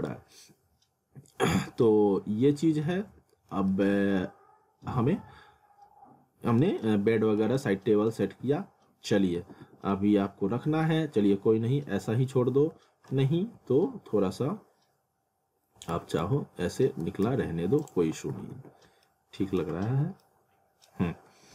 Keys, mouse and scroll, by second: 0.2 scroll down 1, 0.3 middle click, 1.8 middle click, 3.7 middle click, 7.5 middle click, 8.2 w, 9.4 w, 15.9 ctrl+z, 17.3 ctrl+z, 17.8 click, 18.3 alt+w, 19.0 alt+middle click.